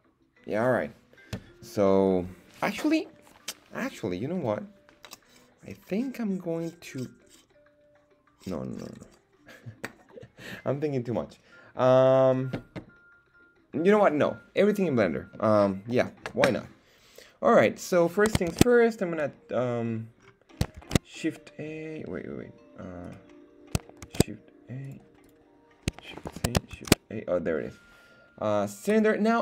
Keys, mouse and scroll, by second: 19.8-20.2 scroll down 2, 20.2 scroll up 2, 23.0 right click, 24.9 click, 25.2 click, 26.4 shift+c, 26.7 shift+a.